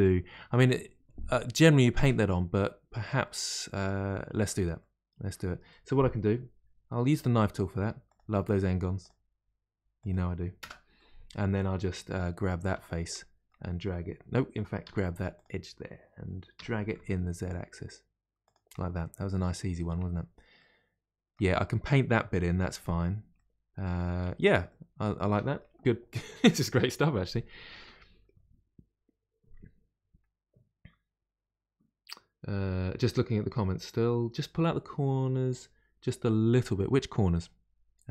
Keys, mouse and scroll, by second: 1.4-2.6 middle drag, 2.6-3.2 scroll up 2, 3.2-7.0 middle drag, 7.0 k, 10.9-12.6 middle drag, 12.6 3, 12.8 click, 13.1-14.8 middle drag, 14.8 2, 15.3 click, 16.5 g, 18.7-20.0 middle drag, 20.0-20.5 scroll down 2, 20.5-24.2 middle drag, 24.2-24.6 scroll down 1, 24.6-27.6 middle drag.